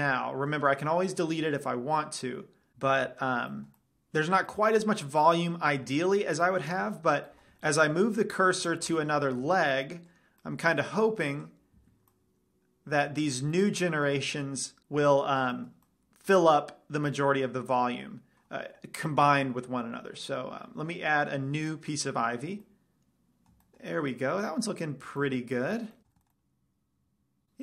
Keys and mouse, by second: 4.9-6.8 middle drag, 6.9-7.2 middle drag, 7.4 KP_Decimal, 9.7 z, 11.8 right click, 12.2 z, 12.2-14.3 middle drag, 14.8-18.7 middle drag, 22.0 click, 24.0 middle drag, 25.0 middle drag, 25.2-27.3 middle drag.